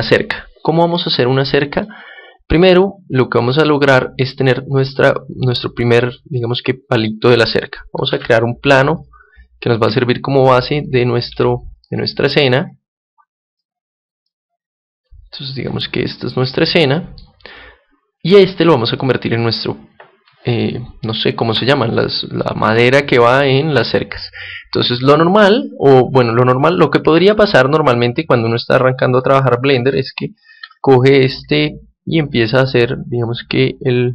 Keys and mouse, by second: 1.7-7.3 middle drag, 8.0 shift+a, 9.8 s, 10.8-16.3 drag, 11.2 s, 16.3-18.0 middle drag, 17.4-19.3 right drag, 18.9-23.3 middle drag, 29.7 Tab, 30.5 ctrl+Tab, 31.3-33.1 right drag, 32.2-34.1 drag.